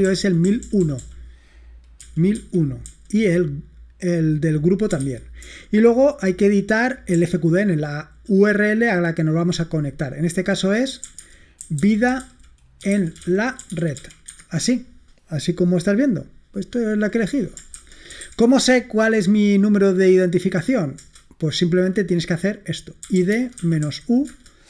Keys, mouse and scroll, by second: 0.0-2.9 typing, 4.8-5.9 typing, 7.2-8.1 l, 10.7-14.5 typing, 17.6-18.8 typing, 21.1 Return, 22.9-24.3 typing.